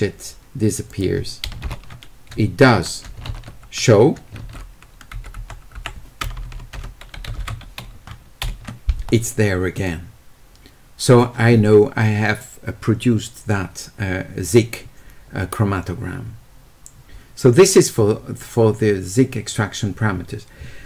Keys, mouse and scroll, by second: 0.8 click, 7.2 s.